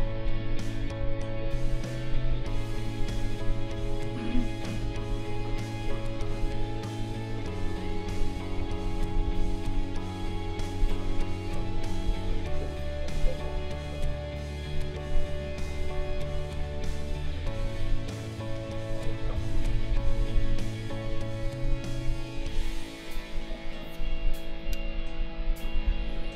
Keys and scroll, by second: 7.7 ctrl+z, 19.3 ctrl+z.